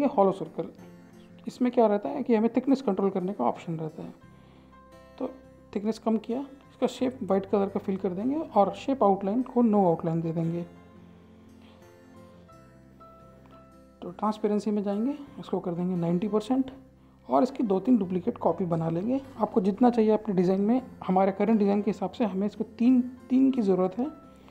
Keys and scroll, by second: 14.6-15.4 typing.